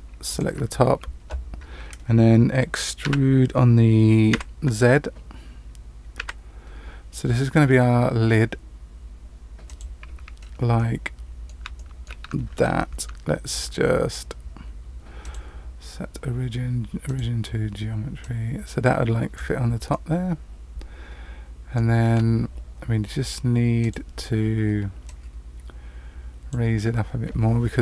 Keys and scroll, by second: 3.0 e, 12.4 Tab, 22.0 Tab.